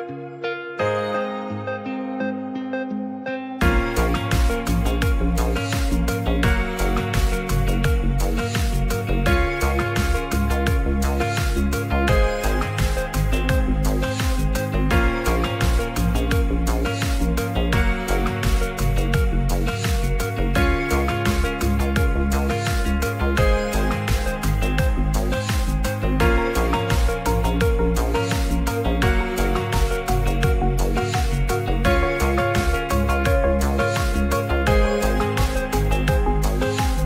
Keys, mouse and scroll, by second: 0.1 s, 3.7 s, 3.7 z, 4.5 ctrl+a, 5.1 middle click, 5.5 right click, 5.9-6.2 middle drag, 8.0-8.4 right drag, 8.6 middle click, 9.7-10.3 drag, 11.3 click, 12.7-14.3 drag, 14.6 click, 15.2 click, 15.9 click, 16.7 shift+click, 17.5 ctrl+p, 19.1 g, 19.6-20.3 middle drag, 21.0-22.0 middle drag, 23.4 ctrl+p, 24.7-25.1 middle drag, 25.4 shift+middle drag, 27.0 click, 28.0 s, 28.9 click, 29.4 alt+middle click, 30.2 click, 30.7 h, 31.4 click, 31.8 shift+click, 32.1 shift+click, 32.6 g.